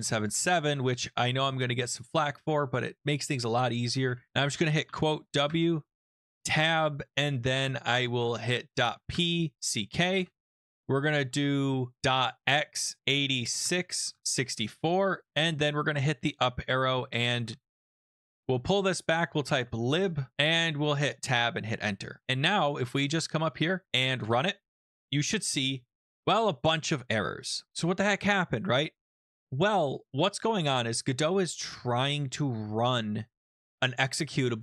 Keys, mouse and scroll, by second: 0.0-0.6 typing, 4.2-5.3 typing, 5.4 Tab, 8.6-9.3 typing, 10.1 Return, 10.8 shift+BackSpace, 10.9 shift+BackSpace, 11.1 shift+BackSpace, 12.4 typing, 13.6 Tab, 14.0-15.2 typing, 17.0-20.4 typing, 22.5 Up, 24.2 shift+Return.